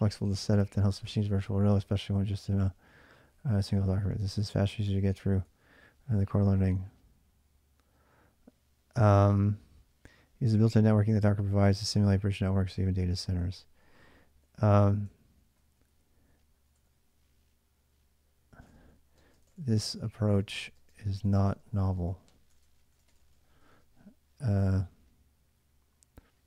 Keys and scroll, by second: 3.0 j, 3.5 j, 3.9 j, 5.2 j, 6.6 k, 8.7 j, 13.6-17.2 typing, 18.5-24.0 typing.